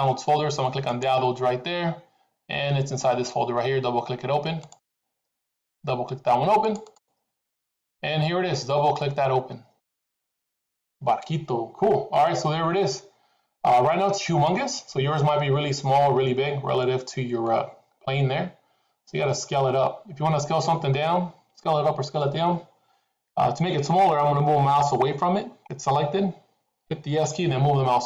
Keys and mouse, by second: 12.7-16.1 middle drag, 16.7 middle click, 27.2 s.